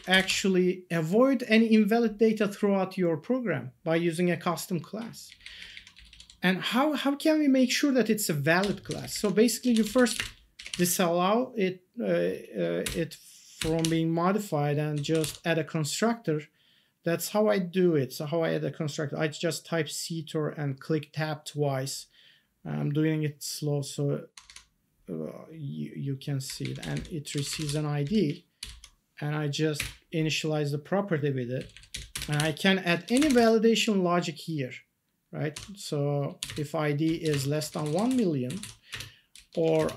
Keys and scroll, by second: 0.1 Return, 0.2 ctrl+s, 5.9 Down, 9.5-10.6 typing, 10.7 ctrl+s, 13.8 ctrl+s, 14.7-15.7 typing, 24.3 Tab, 26.8 Up, 26.9 Left, 27.1-28.1 typing, 29.7 Return, 31.5 Down, 31.9 Up, 32.1 Return, 32.3 ctrl+s, 32.8-33.8 typing, 36.4-39.9 typing.